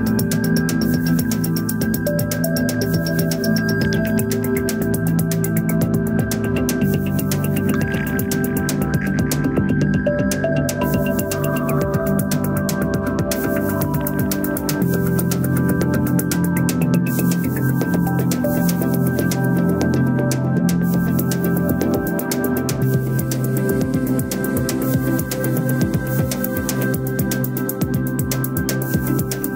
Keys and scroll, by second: 21.5 ctrl+d.